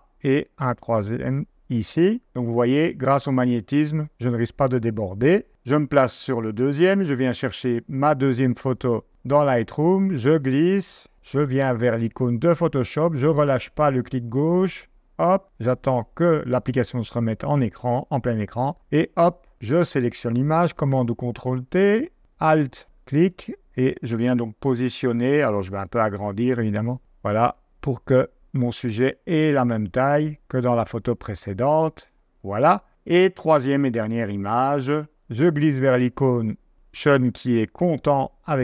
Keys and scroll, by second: 5.5 shift+super+Tab, 6.6 super+Tab, 19.5 super+t, 20.6 super+t, 33.1 super+Tab.